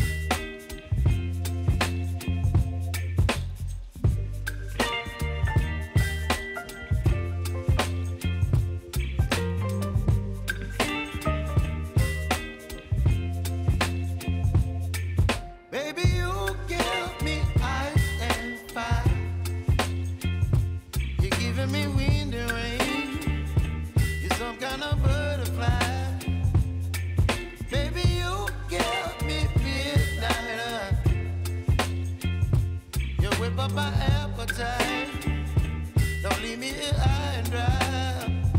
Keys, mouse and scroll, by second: 0.0 click, 8.9 ctrl+d, 9.7 click, 10.3 Return, 10.9-12.6 typing, 12.7 Return, 14.0 click, 14.2 Return, 14.9-16.5 typing, 20.7 click, 25.2-26.0 typing, 26.7 click, 28.7 right click, 29.5 click, 32.4 u, 33.5-38.5 drag.